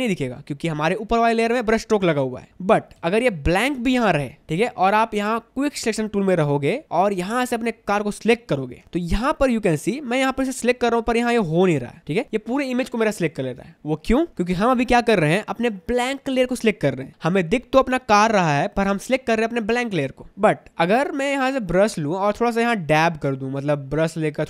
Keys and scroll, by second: 3.1 ctrl+z, 4.0 ctrl+shift+z, 4.9 v, 7.3 space, 8.8 space, 13.4 space.